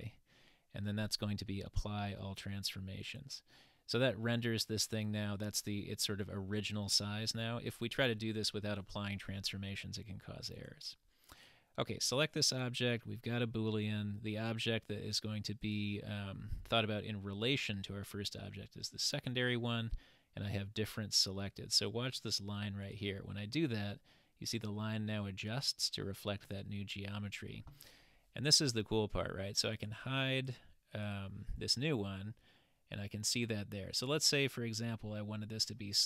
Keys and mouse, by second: 9.9-10.5 middle drag, 11.3 click, 15.7 click, 29.8 click, 30.3 click, 31.0 click, 32.0-35.0 middle drag, 35.8-36.0 middle drag.